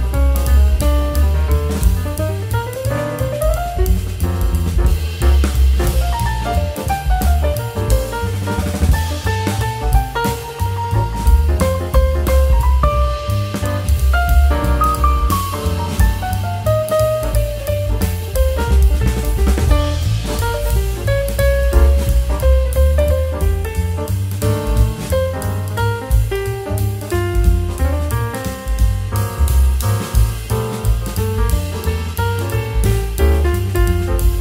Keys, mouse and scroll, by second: 2.3 s, 3.9 click, 4.4 shift+click, 5.0 g, 7.6 s, 8.5 Tab, 8.8 Tab, 9.0 middle click, 9.3-9.6 scroll down 4, 9.6-10.0 middle drag, 10.0 click, 10.4 Tab, 11.5 ctrl+2, 12.9 click, 13.9 middle drag, 14.1 scroll down 1, 14.3 Tab, 14.5 middle click, 14.8 scroll up 2, 15.0 click, 15.7 click, 16.0-16.7 middle drag, 16.7 click, 17.0 middle click, 17.5 shift+click, 17.8-18.6 middle drag, 18.6 x, 20.0 middle click, 20.3 Tab, 20.5 middle click, 20.8 Tab, 21.0 middle click, 21.3 Tab, 21.7 click, 22.5 click, 23.0 scroll up 2, 23.7 Tab, 24.9 click, 26.2 g, 27.6 click, 27.9 shift+click, 28.5 s, 30.6 Tab, 31.2-31.7 middle drag, 31.7-32.4 scroll down 3, 32.4-33.9 drag, 33.9 Tab.